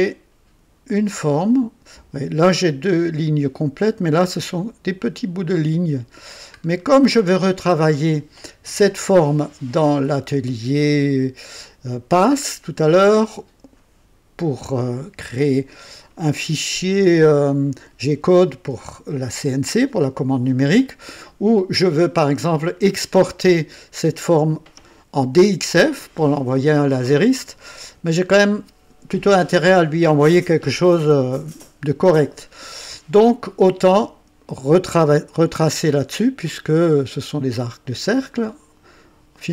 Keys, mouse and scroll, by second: 6.6-7.1 scroll down 1, 7.7 right click, 11.0 click, 14.4 right click.